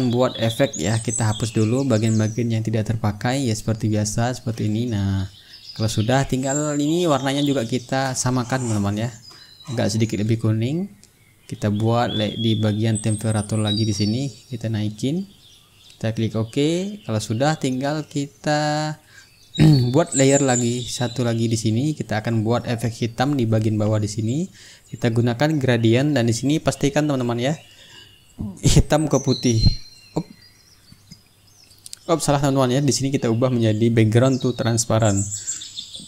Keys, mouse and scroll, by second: 1.2-8.6 drag, 9.2-11.1 drag, 11.6 click, 12.7-14.5 drag, 14.8 click, 16.8 click, 19.0 click, 20.7-22.2 drag, 22.5 click, 23.6 click, 26.1 click, 27.2-28.5 ctrl+middle drag, 29.7 ctrl+click, 31.3-33.8 ctrl+drag, 34.8 click, 35.7 click.